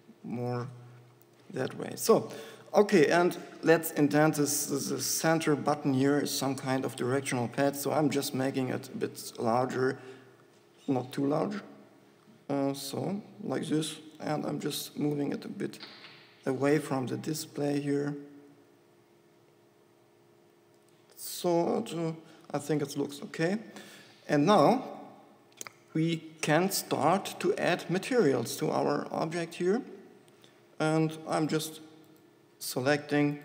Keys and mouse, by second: 1.6 click, 2.0 Tab, 3.4 Tab, 5.6 ctrl+KP_Add, 6.2 ctrl+KP_Add, 8.6 s, 14.6 g, 21.9 click, 22.6 middle click, 22.6 click, 22.9 Tab, 25.9 Tab.